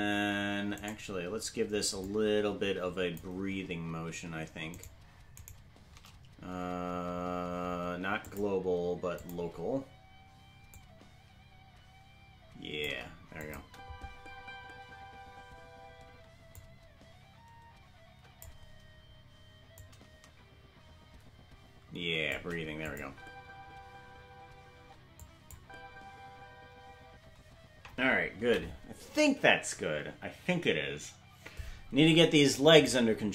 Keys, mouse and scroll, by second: 1.0 right click, 2.0-3.2 drag, 4.9 shift+right click, 8.2-9.4 drag, 10.7-12.9 drag, 13.4 click, 13.6 space, 16.6-18.5 drag, 16.6 space, 19.8-22.4 drag, 22.9 click, 23.0 space, 25.2-27.4 drag, 25.2 space, 25.5 space, 27.4 space, 30.3 ctrl+s, 33.1 right click.